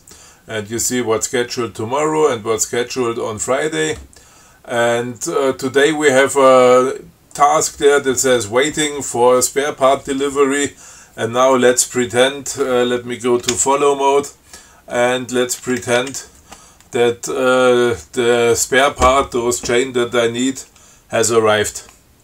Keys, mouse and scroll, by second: 13.8 shift+f, 15.9 Down.